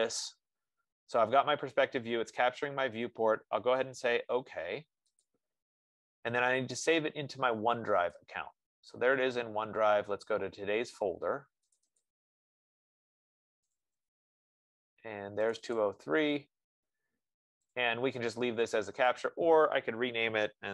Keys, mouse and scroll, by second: 2.4 F15, 5.7-7.7 drag, 8.4 click, 12.1 click, 12.4 click, 14.0 click, 14.4 click, 15.9 click, 16.1 click, 18.2 click, 19.6 click.